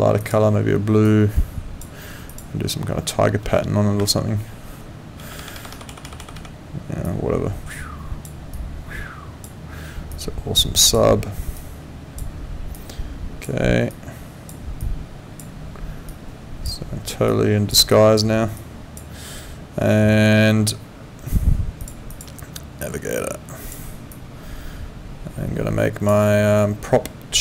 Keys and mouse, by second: 0.2 click, 2.3 click, 4.0 4, 7.0 click, 8.5 click, 10.1 click, 11.6 click, 12.7 click, 13.9 click, 16.1 click, 17.3 click, 21.8 click, 23.6 click.